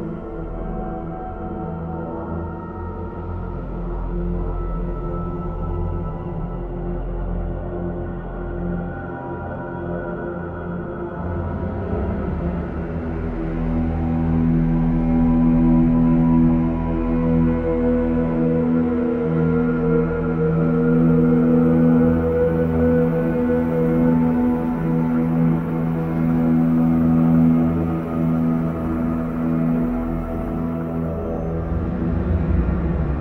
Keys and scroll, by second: 6.8 ctrl+i, 8.2 ctrl+b, 8.3 ctrl+z, 10.7 typing, 17.7 ctrl+z, 25.1 ctrl+i.